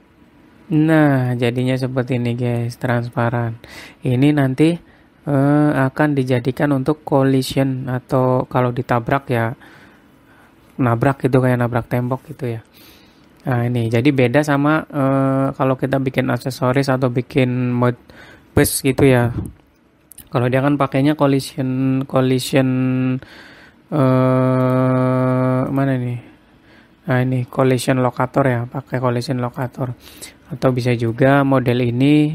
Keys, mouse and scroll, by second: 1.9 middle click, 3.3 scroll up 4, 3.8 middle click, 5.6-6.1 scroll down 3, 6.1 middle click, 14.4 scroll down 2, 14.8 middle click, 15.3-16.1 scroll up 2, 16.1 middle click, 25.2 click, 31.4 middle click.